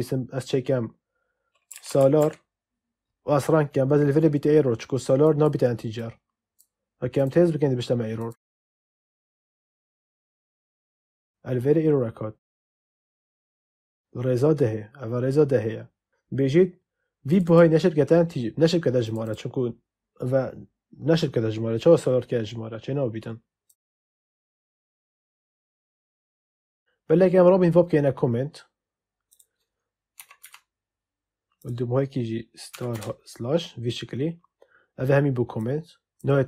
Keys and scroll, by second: 1.4-2.6 typing, 30.1 /, 30.3 *, 32.6 *, 32.8 /.